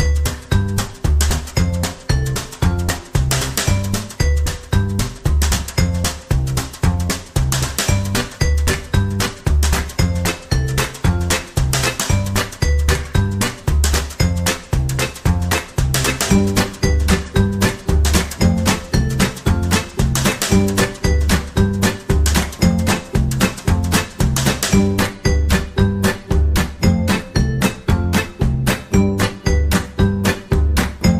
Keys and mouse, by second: 1.6 right click, 1.9 g, 4.4 g, 5.7 alt+z, 6.0 right click, 6.6 g, 7.4 alt+z, 7.8 right click, 8.2 g, 8.7 c, 9.6 g, 10.5 alt+z, 11.0 g, 11.6 alt+z, 12.0 shift+middle click, 12.9 alt+z, 13.3 shift+middle click, 17.0 ctrl+r, 18.8 shift+middle click, 21.8 alt+right click, 22.4 g, 24.8 right click, 25.0 c, 25.8 g, 27.1 right click, 27.4 c, 28.1 g, 29.9 right click, 30.1 c.